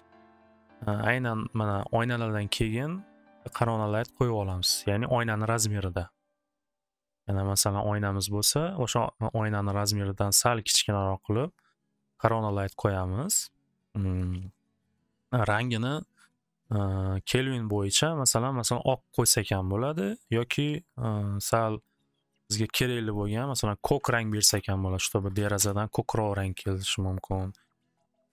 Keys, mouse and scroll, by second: 0.7 middle click, 0.9 w, 2.5 middle click, 3.3 click, 5.6 w, 7.0 middle click, 7.7 middle click, 8.1 middle click, 9.8 middle click, 14.0 middle click, 16.7 click, 17.5 click, 19.5 click, 21.8 click, 23.1 click, 23.3 click, 23.7-24.9 typing, 25.6 Return, 27.4-28.2 typing.